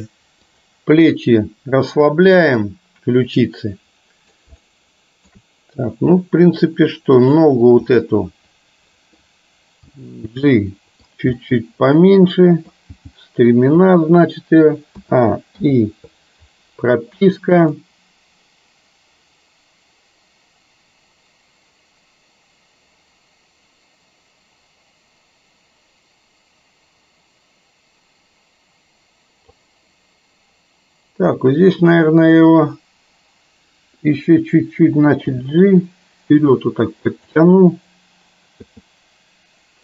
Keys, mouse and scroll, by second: 2.7-4.4 middle drag, 4.7-5.4 shift+middle drag, 7.4 click, 7.9-9.2 middle drag, 9.9 g, 11.4-12.8 middle drag, 15.1 a, 15.7 i, 17.8-29.7 drag, 32.4 click, 35.4 g, 38.7 i.